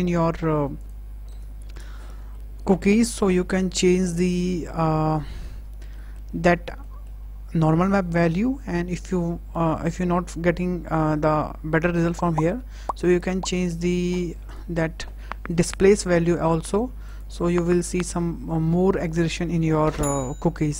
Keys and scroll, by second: 1.1 KP_0.